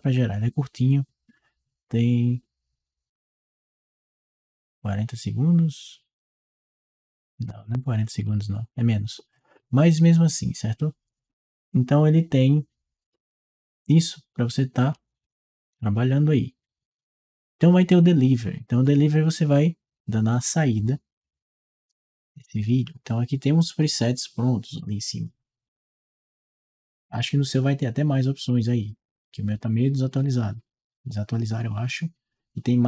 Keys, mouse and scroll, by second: 14.3-15.6 drag, 17.7 click, 25.5 click, 28.3 click, 29.4 click.